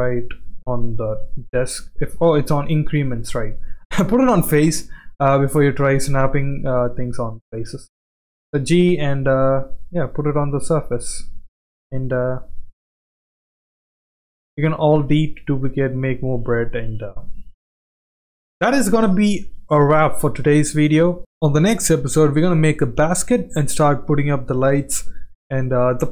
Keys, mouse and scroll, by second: 3.1-5.0 drag, 5.2 click, 5.5-6.0 middle drag, 6.6 click, 7.1 click, 8.5 ctrl+g, 10.1-10.8 middle drag, 11.0 g, 13.3 click, 13.6-14.0 middle drag, 14.4 click, 14.9 alt+d, 15.9 r, 17.7 g, 18.0 drag, 18.3-18.8 middle drag, 18.8 scroll down 1, 19.1-19.4 middle drag, 19.7 middle click, 19.9 scroll down 1, 20.8-21.1 shift+middle drag.